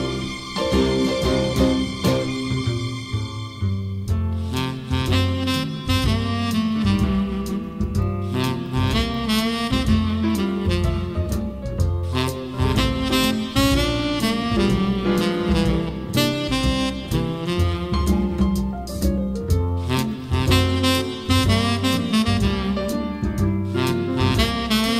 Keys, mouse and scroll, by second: 0.0-4.8 drag, 5.1-6.4 drag, 6.4-8.3 middle drag, 6.4 scroll, 6.6 scroll, 7.4 scroll down 1, 7.5-7.9 scroll down 1, 7.9 scroll down 1, 8.0 scroll, 8.3-12.3 scroll down 31, 11.0-12.3 middle drag, 12.3 click, 13.1 Delete, 14.5 s, 15.1-16.2 middle drag, 15.1 scroll down 3, 15.3 scroll, 16.2-20.2 drag, 20.3-21.6 drag, 23.1-24.9 middle drag, 23.1-23.5 scroll, 24.1-24.7 scroll.